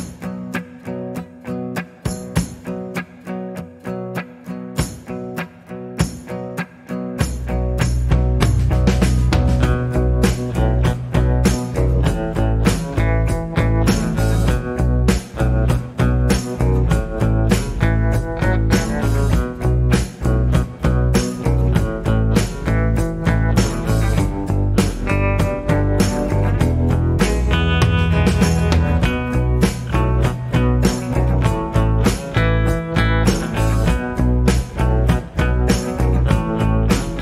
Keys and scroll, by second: 13.5 alt+h, 26.2 alt+g, 27.0 alt+f, 29.3 alt+h.